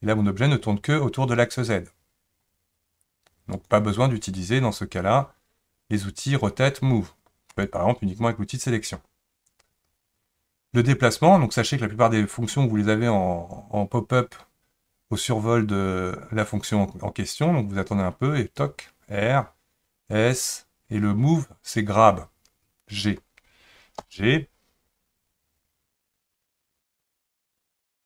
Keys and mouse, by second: 7.7 click, 24.0 g.